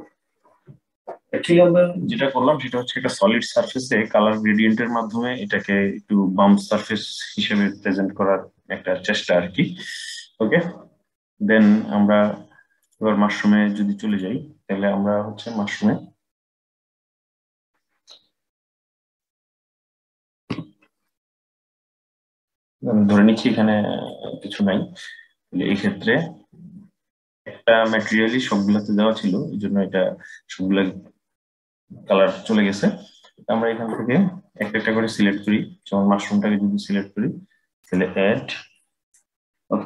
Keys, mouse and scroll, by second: 12.5 click, 13.8 click, 18.8 click, 20.2 Delete, 21.8-23.9 drag, 23.9 Delete, 34.3 click, 35.0 click, 37.6-39.8 drag.